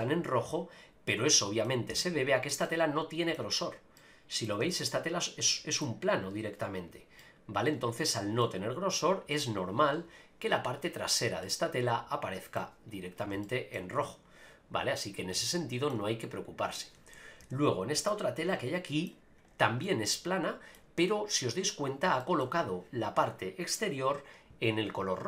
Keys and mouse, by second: 1.9 Tab, 2.6 middle click, 4.0 middle click, 4.6 Tab, 5.2 middle click, 7.2-8.4 middle drag, 11.4-12.6 middle drag, 13.4-13.7 shift+middle drag, 15.5-15.9 shift+middle drag, 16.7 click, 17.4 KP_Decimal, 18.1-19.1 middle drag, 19.8-20.7 middle drag, 22.2 shift+middle drag.